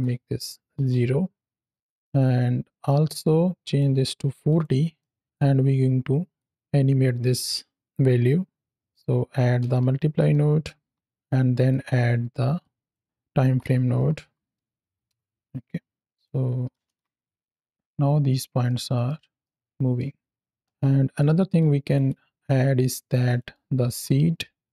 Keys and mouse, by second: 1.7 click, 3.5-4.6 drag, 4.9 middle click, 6.3-8.7 drag, 11.1 click, 11.6 click, 12.5-12.8 drag, 16.0-17.2 drag, 17.1 KP_0, 17.2 shift+Left, 17.2 space, 18.5-18.9 middle drag, 19.3-19.8 middle drag, 20.6-21.0 middle drag, 20.6 space, 21.4-21.8 drag, 21.9-23.0 drag, 23.1 click, 23.7 shift+d.